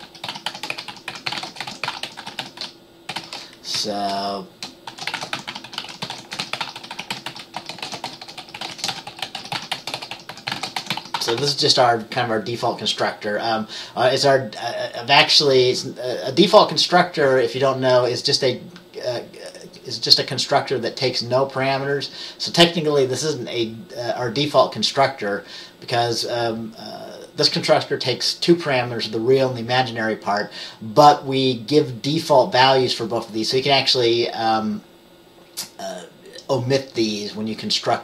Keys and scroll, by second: 1.2-11.5 typing, 3.9 Down.